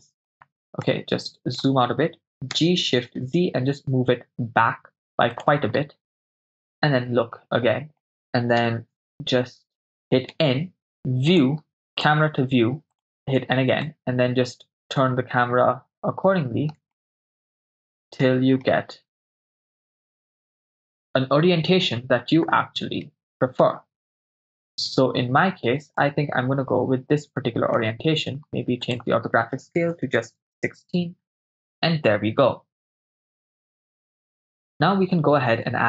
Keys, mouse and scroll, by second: 0.3 right click, 0.9-1.7 ctrl+middle drag, 2.6 g, 3.0 shift+z, 5.3 click, 6.3 KP_0, 8.1 middle click, 8.7 KP_0, 8.9-9.9 shift+middle drag, 11.3 click, 12.0-13.4 drag, 13.4 n, 13.8 middle click, 17.0 shift+middle click, 19.3 middle click, 20.6-22.4 shift+middle drag, 23.1-25.5 shift+middle drag, 26.1 ctrl+middle click, 26.1 shift+scroll down 1, 28.9-30.3 drag.